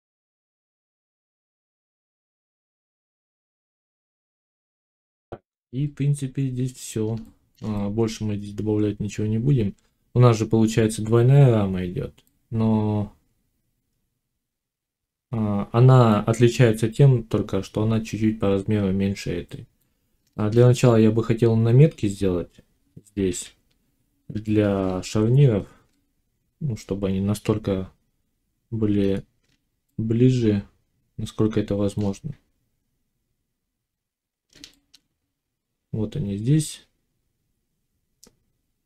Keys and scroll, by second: 0.4 Tab, 2.7 /, 3.6 ctrl+s.